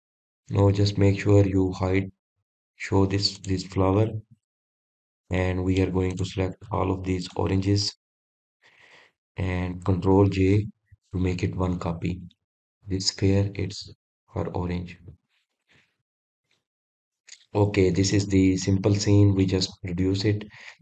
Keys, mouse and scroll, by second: 0.2 click, 1.0-1.6 scroll up 1, 1.6-2.6 scroll down 1, 4.1 click, 5.0 click, 5.6-6.5 middle drag, 6.5-7.0 scroll up 1, 7.0-7.8 middle drag, 7.8 click, 8.4 shift+click, 8.9 shift+click, 9.5 shift+click, 10.0 shift+click, 10.4 shift+click, 12.2 ctrl+j, 14.0 click, 14.2-17.4 drag, 19.1 scroll up 1, 19.3-19.8 scroll down 2, 19.8 drag, 20.3-20.8 middle drag.